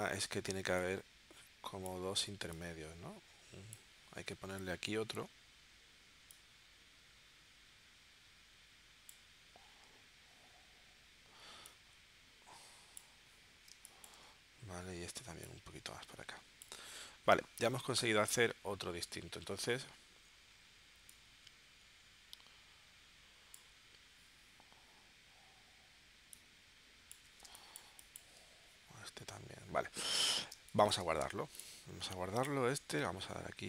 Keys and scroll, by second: 13.7 space, 27.5 space, 30.5 space, 31.2 v.